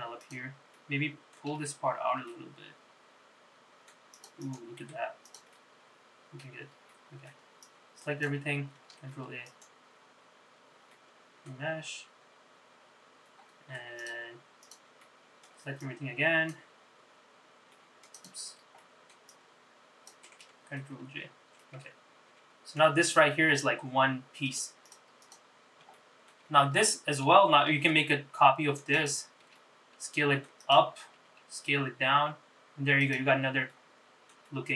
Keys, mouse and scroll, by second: 0.3 click, 0.9 middle click, 2.3 g, 4.5 click, 5.1 Tab, 5.4 click, 5.7 middle click, 6.7 scroll down 2, 7.0 middle click, 7.7 click, 9.1 ctrl+a, 11.0 middle click, 11.8-12.8 scroll down 4, 12.8-13.4 scroll down 2, 13.5-14.1 scroll up 5, 14.1 click, 14.7 click, 15.1 middle click, 15.9 click, 17.8 middle click, 18.3 click, 18.9 middle click, 19.4 click, 21.3 ctrl+j, 21.7-22.9 middle drag, 23.2 g, 24.9 click, 25.3 click, 25.7-26.1 scroll down 2, 26.1 shift+middle click, 27.9 shift+d, 29.5 s, 31.3 s, 33.8 middle click, 34.6 middle click.